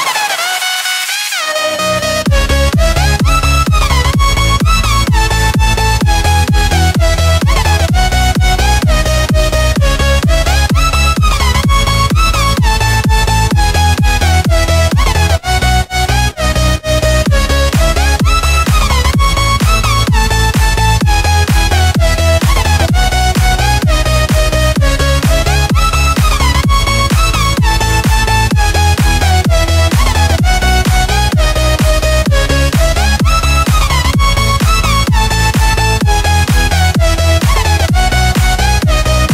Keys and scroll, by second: 0.0-3.6 typing, 3.7 super+space, 3.8 super+space, 4.0 super+space, 4.1 super+space, 4.2 super+space, 5.4 space, 5.9 alt+super+space, 6.0 alt+super+space, 6.1 alt+super+space, 6.2 alt+super+space, 6.2 alt+super+space, 6.3 alt+super+space, 6.4 alt+super+space, 6.6 alt+super+space, 7.3 super+space, 8.2-8.7 alt+super+space, 10.3 alt+super+space, 10.4 alt+super+space, 10.5 alt+super+space, 10.7-13.3 alt+super+space, 18.9 Delete, 19.3 Delete, 32.7 super+x, 33.9 Delete, 34.9 Delete, 36.9 super+f, 38.0-38.5 typing.